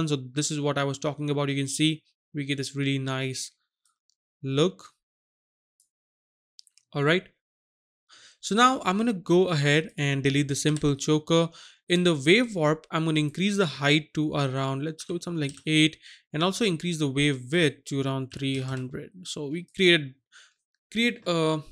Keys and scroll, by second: 10.7 Delete, 15.0 KP_8, 15.4 Return, 18.3 KP_3, 18.6 KP_0, 18.7 KP_0.